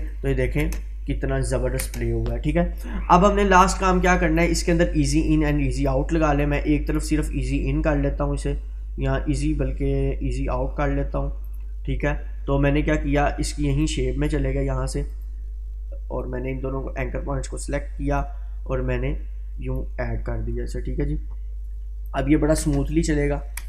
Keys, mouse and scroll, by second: 0.3-0.7 click, 0.6 space, 2.3-2.9 drag, 6.9 right click, 11.5-20.1 drag, 22.1-22.7 click, 22.6 space.